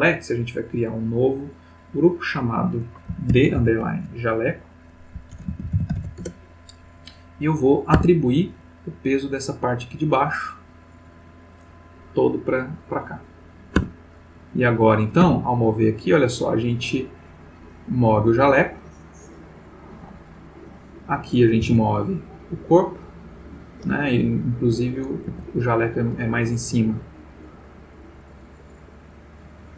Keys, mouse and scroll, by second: 0.9 click, 2.0 click, 3.3 shift+d, 3.6 shift+-, 5.3-6.0 typing, 6.2 shift+Return, 7.9 Tab, 9.6-11.6 drag, 12.8 click, 13.9 Tab, 14.5 click, 15.2 g, 19.9 Escape, 21.0 click, 21.6 r, 23.4 Escape, 24.8 click, 25.3 Tab, 29.2-29.7 drag.